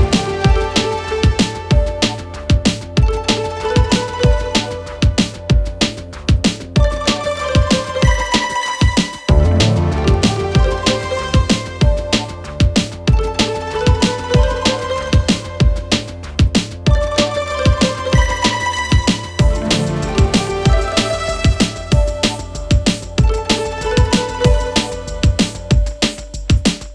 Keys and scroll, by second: 1.2 4, 4.4 ctrl+F1, 5.3 3, 6.8 4, 9.9 Delete, 11.8 5, 14.1 1, 15.0 shift+f, 18.8 4, 19.2 5.